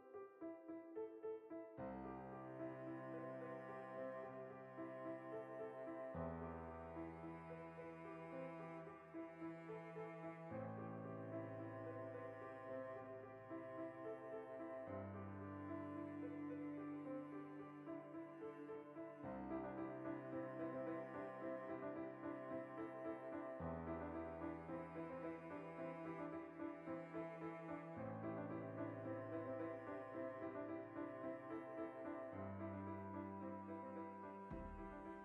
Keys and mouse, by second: 0.0 ctrl+z, 1.3 ctrl+r, 2.4 click, 2.5-4.9 middle drag, 3.4 ctrl+r, 4.2 click, 4.9 ctrl+r, 5.2 right click, 5.3-9.6 middle drag, 6.1 Tab, 8.5 Tab, 9.4 3, 9.6-10.6 alt+right drag, 10.6 ctrl+KP_Add, 11.1 middle click, 12.6 s, 15.7 shift+click, 16.2 ctrl+z, 16.5 click, 17.1 s, 18.6 click, 20.2 ctrl+r, 20.9 click, 21.0-26.5 middle drag, 22.8 Tab, 23.7 KP_Decimal, 26.5-29.7 right drag, 29.7 ctrl+l, 30.0-31.7 right drag, 31.7 click, 32.3-33.3 right drag, 33.3 ctrl+l, 33.9-34.4 right drag, 34.4-35.2 drag.